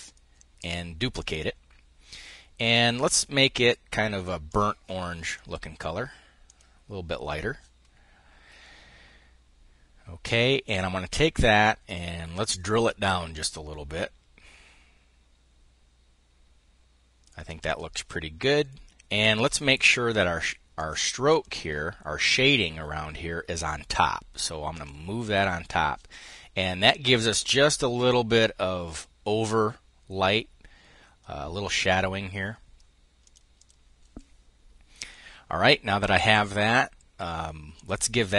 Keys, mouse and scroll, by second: 0.7-1.8 drag, 2.7-4.5 drag, 4.8 click, 6.1 click, 11.2-17.4 ctrl+shift+drag, 18.0 click, 19.3 click, 20.4 click, 20.9 click, 24.4 click, 32.8 click, 37.3 click.